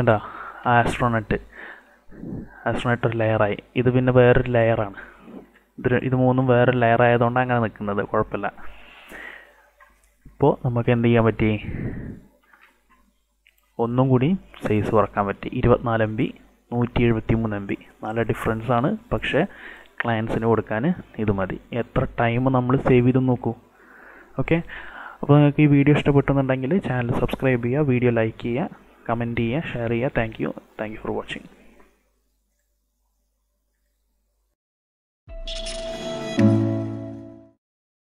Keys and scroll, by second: 3.1 ctrl+alt+z, 12.4 ctrl+s.